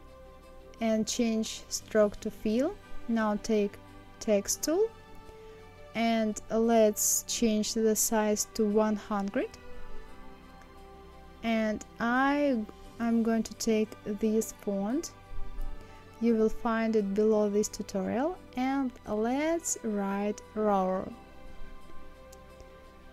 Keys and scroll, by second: 8.4 KP_1, 8.7 KP_0, 9.6 Return, 16.9 shift+r, 18.1 shift+o, 19.1 shift+a, 20.0 shift+r, 20.6 shift+1.